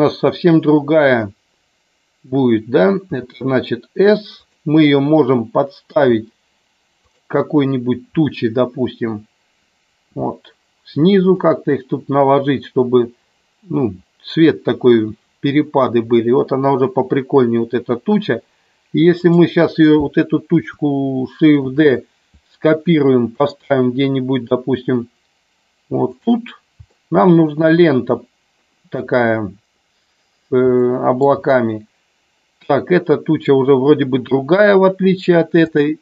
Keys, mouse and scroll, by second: 3.1 s, 4.4 click, 5.8 g, 10.0 g, 11.3 click, 19.1 click, 21.6 shift+d, 26.8 shift+middle click, 30.8 shift+middle click.